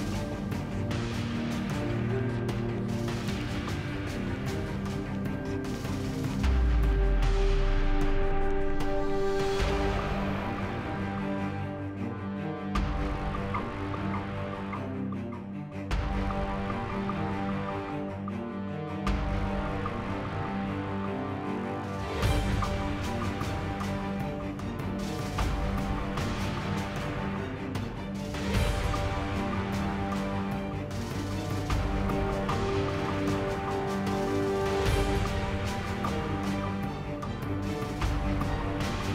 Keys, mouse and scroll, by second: 0.0 x, 0.2 z, 2.1 z, 2.2 KP_7, 17.5 Tab, 18.1 a, 18.2 a, 18.4 a, 20.3 s, 21.0 Tab, 26.7 shift+a, 38.3 Tab.